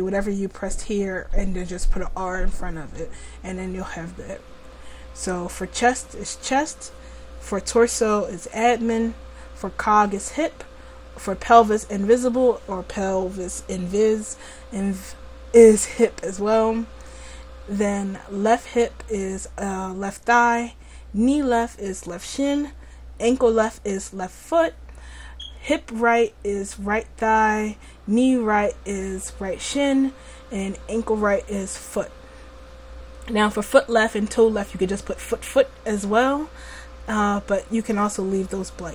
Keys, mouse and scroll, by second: 4.5-38.9 scroll down 1.